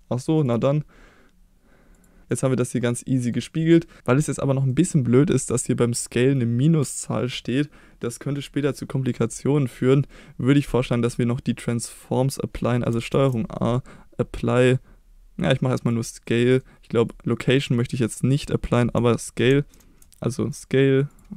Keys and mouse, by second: 0.5-2.2 drag, 2.3 click, 2.8 middle click, 4.7 middle click, 8.1 middle drag, 10.1-10.6 middle drag, 11.1 click, 11.5 middle drag, 13.1 ctrl+a, 16.5 middle click, 17.0 click, 17.2 middle click, 19.7 ctrl+a, 21.1 click.